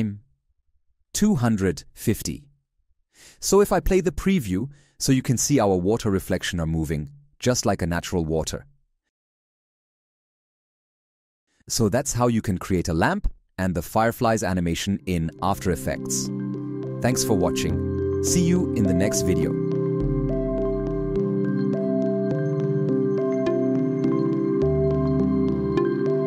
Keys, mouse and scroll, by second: 0.6 shift+8, 9.8 ctrl+a.